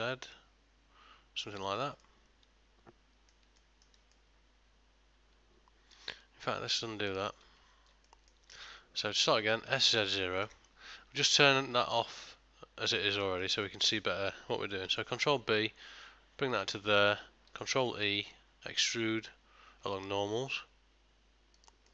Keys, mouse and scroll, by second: 2.1 middle click, 3.6 ctrl+middle click, 4.2 middle click, 6.2 ctrl+z, 6.6 ctrl+z, 8.1 middle click, 8.6 ctrl+middle click, 9.7 s, 13.3 ctrl+middle click, 13.7 middle click, 14.9 ctrl+b, 17.0 middle click, 17.8 alt+e.